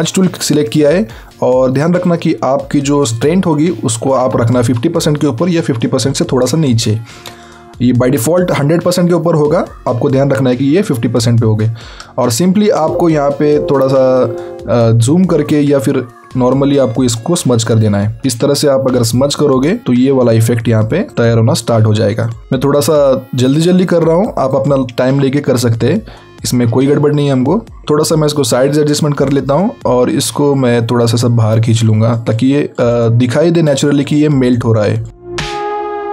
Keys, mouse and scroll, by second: 18.2-18.6 alt+scroll up 1, 18.6 click, 19.8 scroll down 1, 20.4 click, 25.5 click, 27.0 scroll down 1, 27.3 scroll up 1, 27.5 scroll down 1, 28.0 alt+right click, 29.6 click.